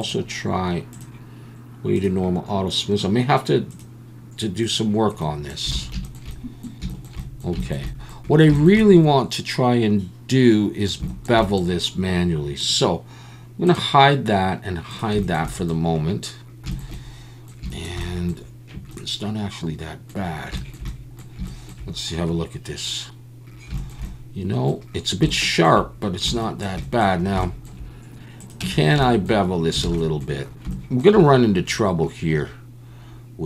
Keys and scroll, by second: 5.7 alt+a, 28.6 Tab, 29.8 alt+a.